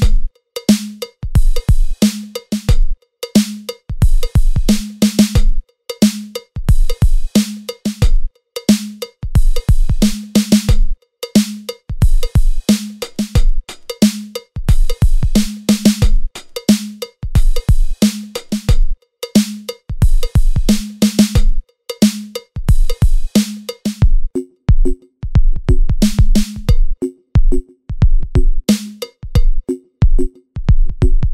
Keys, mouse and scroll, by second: 0.0 e, 0.7 middle click, 0.7 scroll down 2, 1.8 middle click, 1.8 scroll up 2, 1.8 middle click, 2.2 click, 2.2-2.7 scroll down 2, 2.3 right click, 2.6 middle click, 2.6 scroll up 1, 2.7 click, 2.8 click, 3.6 middle click, 3.6 scroll up 1, 3.9 click, 4.5 middle click, 4.6 middle click, 4.6 scroll up 1, 4.7 middle click, 4.7 scroll down 5, 4.8 middle click, 4.9 s, 5.1 scroll up 6, 5.3 ctrl+a, 5.3 shift+middle click, 5.9 scroll up 2, 5.9 shift+middle click, 6.0-6.7 shift+scroll down 3, 6.1 shift+middle click, 6.1-9.0 typing, 6.7 middle click, 6.8-7.1 scroll up 1, 7.1 shift+middle click, 7.1 scroll down 2, 7.3 scroll down 25, 7.6 scroll up 1, 7.8 Tab, 7.8 scroll down 1, 8.1-8.7 scroll up 6, 8.2 click, 8.4 click, 8.5 alt+click, 8.7 alt+click, 8.7-9.1 scroll down 3, 9.5 Tab, 9.6 middle click, 9.6 scroll down 1, 9.7 shift+middle click, 9.9 click, 10.0 middle click, 10.1 Tab, 12.7 middle click, 12.8 scroll down 4, 12.9 middle click, 13.1 middle click, 13.4 click, 13.8 click, 13.9 click, 13.9 middle click, 14.0 scroll up 6, 14.2 middle click, 14.2-14.9 scroll down 4, 14.2 e, 14.8 middle click, 15.1 g, 16.9 e, 22.6 middle click, 22.6 scroll down 2, 23.1 scroll up 3, 23.3 middle click, 23.4 s, 23.7 shift+d, 23.7 p, 24.2 click, 24.2 Tab, 24.4 a, 27.9 click, 28.0 middle click, 28.0 scroll down 1, 28.1 shift+middle click, 28.8 ctrl+r, 28.8 click, 29.0 middle click, 29.1 click, 29.1 scroll down 1, 29.4 Tab, 29.5 right click, 29.5 click, 29.7 s, 29.9 click, 30.1 s, 30.5 click, 30.6 Tab, 30.7 click, 30.8 alt+click, 31.1 e.